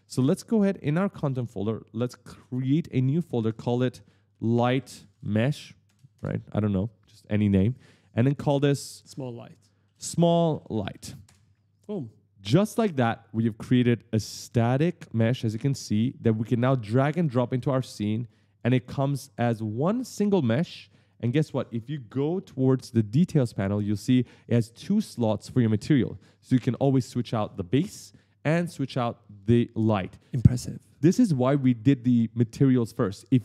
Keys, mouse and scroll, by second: 4.1 shift+l, 4.9 shift+m, 5.3 j, 5.7 BackSpace, 9.6 shift+s, 20.9 right click, 23.3-23.6 scroll up 1, 23.8-24.1 scroll down 1.